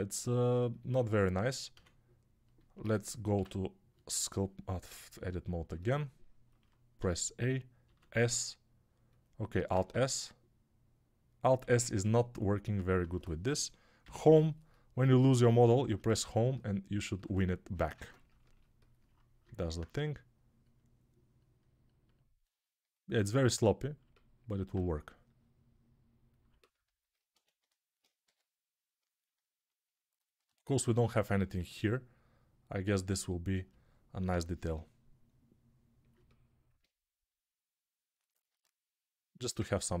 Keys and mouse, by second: 0.0-40.0 typing, 9.4-20.8 alt+middle drag, 9.6 alt+s, 13.9 Home, 17.8 ctrl+Tab, 20.8-33.5 drag, 27.2 Tab, 30.7 right click, 33.5-37.5 alt+middle drag, 37.5-40.0 drag.